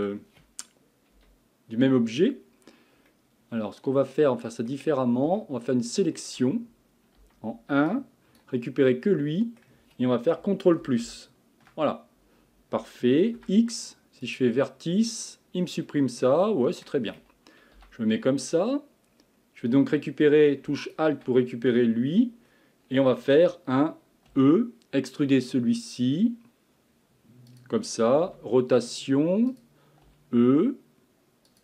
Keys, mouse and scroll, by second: 0.1-1.2 scroll up 1, 1.2 KP_1, 3.1-4.9 middle drag, 4.9-5.4 scroll up 4, 5.4-7.2 shift+middle drag, 7.2 1, 7.9 click, 8.9-10.8 middle drag, 10.8 KP_Add, 11.1 KP_Add, 13.4 x, 15.9-17.8 middle drag, 17.8 KP_3, 19.1-19.8 scroll up 4, 20.8 alt+click, 21.7 scroll down 1, 22.5-24.6 scroll down 6, 24.6 e, 28.2 r, 30.4 e.